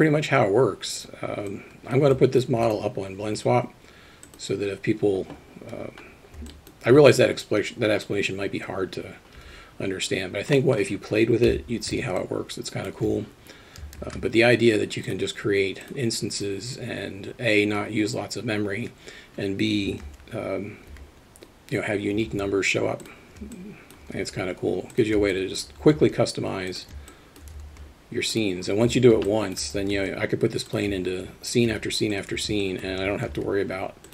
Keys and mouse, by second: 1.5 click, 2.1 alt+middle drag, 6.6 alt+middle click, 9.4 KP_3, 10.5 middle click, 11.6 KP_3, 12.5-13.5 middle drag, 14.0 shift+a, 20.1 alt+r, 20.9 g, 21.7 alt+d, 22.6 alt+d, 23.9 alt+shift+middle click, 24.5 alt+d, 25.3 alt+shift+middle click, 26.4 alt+d, 27.2 alt+shift+middle click, 28.0 alt+d, 29.3 shift+click, 30.3 alt+d, 31.7 g, 32.8 alt+shift+middle click, 33.7 alt+d.